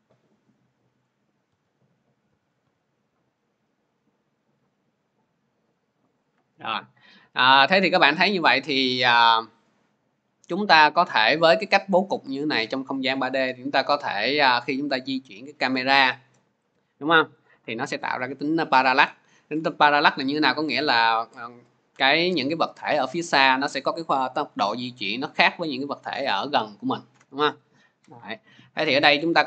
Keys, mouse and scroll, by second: 0.8 click, 1.3-2.4 typing, 4.2 click, 7.7 click, 13.5 click, 16.5 p, 17.4 click, 20.5 click, 27.0-29.4 drag.